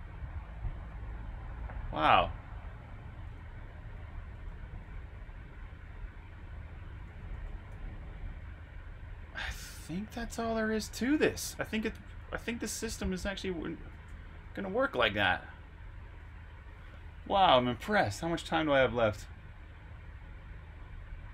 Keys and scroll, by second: 1.6 typing, 3.6-5.4 typing, 6.7-9.0 typing, 14.4 super+q, 14.4 typing.